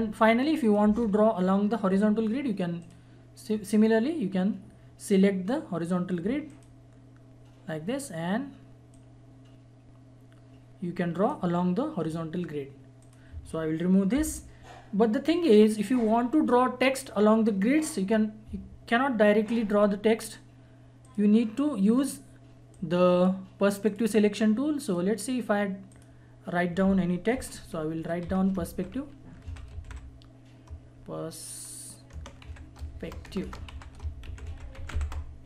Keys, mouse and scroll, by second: 0.6 click, 0.9 Delete, 2.8 click, 6.5 click, 8.9-13.0 drag, 14.1 Delete, 18.1-19.3 scroll up 1, 21.0-23.0 scroll up 1, 23.0 click, 28.2-30.3 typing, 32.1-35.4 typing.